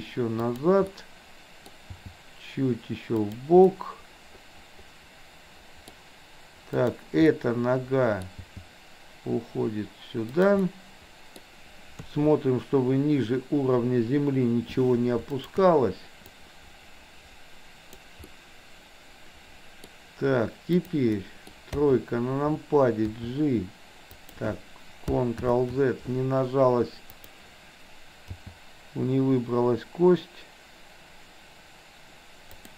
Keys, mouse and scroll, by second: 0.9 middle click, 2.0 g, 3.6-6.0 middle drag, 6.7 click, 7.2-8.2 middle drag, 8.4 g, 10.6-11.4 middle drag, 12.0 KP_3, 15.4 shift+click, 16.4-18.1 drag, 18.4-19.9 middle drag, 20.6 click, 21.2 middle click, 21.7 KP_3, 23.2 g, 25.4 ctrl+z, 27.1 click, 28.2 g.